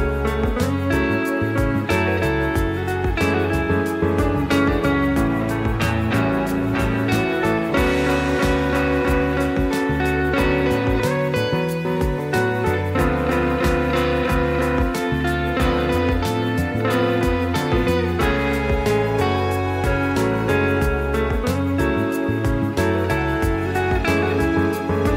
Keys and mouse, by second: 0.6 shift+middle click, 1.1 s, 2.1 middle drag, 2.6-3.1 drag, 3.6-4.0 drag, 4.1 shift+middle drag, 5.4 click, 6.1 s, 7.6-8.2 drag, 8.3-8.9 middle drag, 9.0 shift+middle drag, 9.2-9.9 middle drag, 10.2 click, 10.5-10.8 middle drag, 11.1 click, 11.5 click, 12.0 s, 12.6 middle click, 13.9 click, 14.7 click, 15.0-15.6 drag, 15.7-16.4 middle drag, 16.9 click, 17.5-18.0 drag, 18.1-18.8 middle drag, 19.1 shift+d, 20.3-21.7 drag, 21.9-22.3 middle drag, 22.4-22.9 middle drag, 23.1-24.0 middle drag, 24.2 middle drag, 24.7 middle drag.